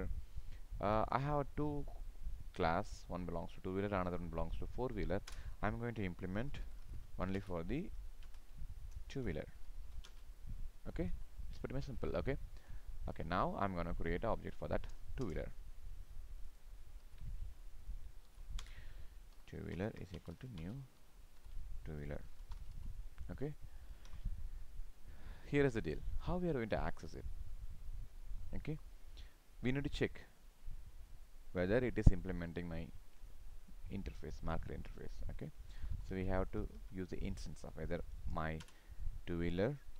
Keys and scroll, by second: 7.3 ctrl+space, 11.1 ctrl+s, 17.1 ctrl+c, 18.3 ctrl+v, 21.4 ctrl+v, 22.8 ctrl+s.